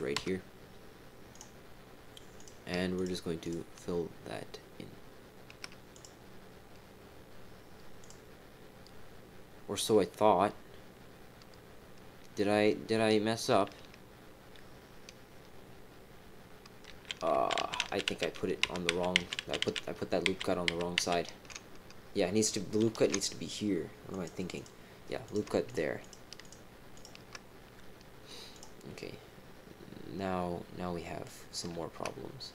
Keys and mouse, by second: 0.1 x, 2.9 shift+click, 3.4 shift+click, 5.9 click, 8.0 click, 16.8 ctrl+z, 17.3 ctrl+z, 17.5 ctrl+z, 17.8 ctrl+z, 18.0 ctrl+z, 18.6 ctrl+z, 18.9 ctrl+z, 19.1 ctrl+z, 19.4 ctrl+z, 19.6 ctrl+z, 20.2 ctrl+z, 20.6 ctrl+z, 20.9 ctrl+z, 22.9 ctrl+r, 25.2 click, 25.6 shift+click, 26.0 shift+click, 26.4 shift+click, 26.9 shift+click, 28.5 click.